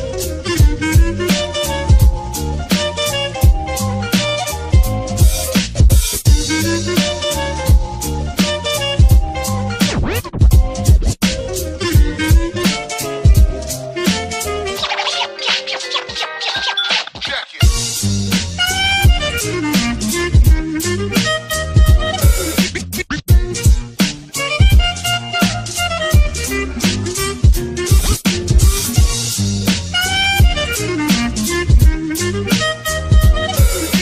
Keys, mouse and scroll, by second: 4.5 space, 6.6 space, 7.8 space, 13.6 space, 15.8 space, 15.8 ctrl+-, 15.9 space, 17.8 ctrl++, 19.3 ctrl+-, 19.4 ctrl++, 20.4 space, 20.8 space, 23.3 ctrl+0, 27.1 space, 28.0 ctrl+-, 29.8 space, 30.7 space, 31.7 space, 32.2 space, 33.2 ctrl+-, 33.3 space, 33.8 space.